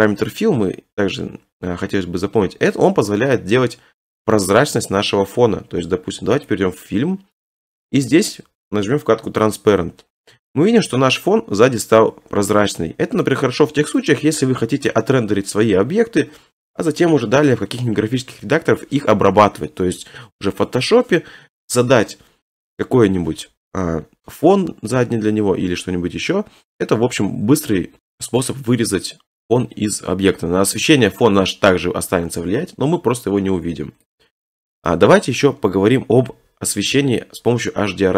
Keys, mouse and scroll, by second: 6.5 click, 7.0 middle click, 8.5 middle click, 9.6 click, 10.7-11.3 scroll, 12.2 scroll, 14.3 scroll, 14.9 click, 15.2 middle click, 16.4 d, 34.1 click.